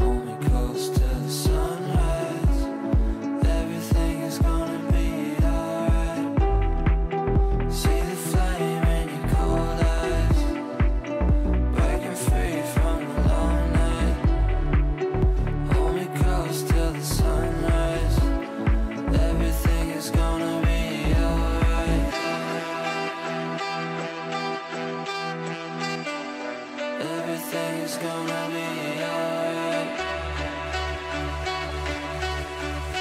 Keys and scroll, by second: 14.6 Delete, 21.2 shift+Page_Down, 25.7 shift+Page_Down, 29.8 ctrl+g.